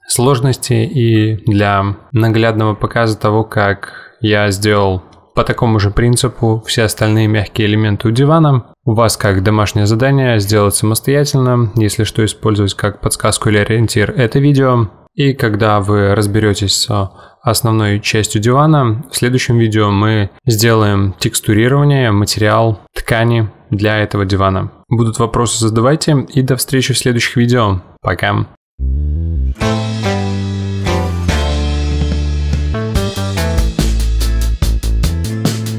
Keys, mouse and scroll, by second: 0.0-0.3 scroll up 1, 0.3 s, 2.1 middle click, 2.3 scroll down 2, 2.5 z, 2.9 middle click, 3.2 KP_7, 3.6 g, 5.6-6.9 shift+middle drag, 6.9 z, 7.3-9.2 middle drag, 9.5 scroll down 1, 9.6 middle click, 10.5 g, 11.2-12.2 middle drag, 12.2 scroll up 2, 12.3-13.3 middle drag, 14.7 Tab, 15.0 middle click, 15.4 ctrl+r, 17.1 middle click, 18.0 ctrl+r, 19.4-20.6 middle drag, 20.6-21.6 drag, 22.2 click, 22.8 click, 23.4 middle click, 23.7 Tab, 23.9 Tab, 24.2 middle click, 24.6 Tab, 24.8 middle click, 25.0 Tab, 28.5 click, 29.0 click, 29.5 middle click, 29.7-30.1 scroll down 5, 30.1-31.2 middle drag, 32.2 click, 32.9 middle click, 33.1 scroll up 1, 33.4-34.4 middle drag, 35.0-35.7 drag.